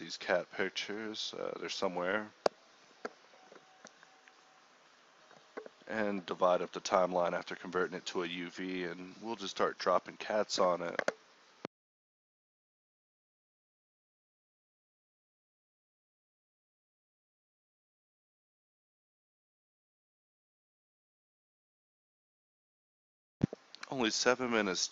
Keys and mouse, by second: 4.7 Home, 10.4 shift+a, 13.9 z, 14.1 s, 14.6 ctrl+1, 15.1 ctrl+2, 16.2 click, 16.3 s, 16.5 g, 16.7-19.4 drag, 19.4 ctrl+a, 20.3 g, 21.1 g, 22.0 ctrl+z, 23.2-24.9 typing.